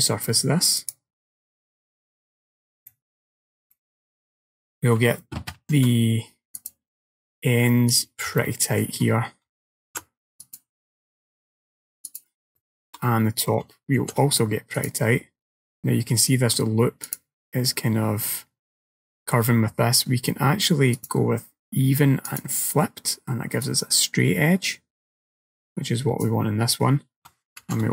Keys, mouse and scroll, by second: 3.0 click, 3.0 middle click, 3.8 shift+middle click, 4.3-5.1 scroll up 1, 5.1 scroll up 2, 5.6 ctrl+r, 8.5 shift+middle click, 9.9 ctrl+r, 12.6 shift+middle click, 14.1 ctrl+r, 21.0 click, 22.3 click, 23.7 click, 27.7 ctrl+r.